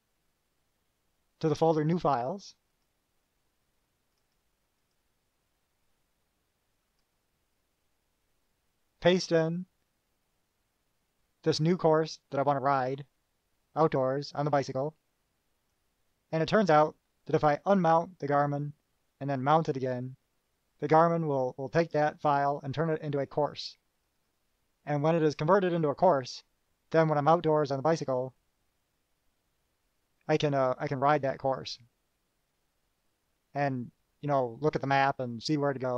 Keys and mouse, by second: 2.8 click, 4.3 click, 5.0 right click, 7.2 click, 15.9 click, 24.2 click.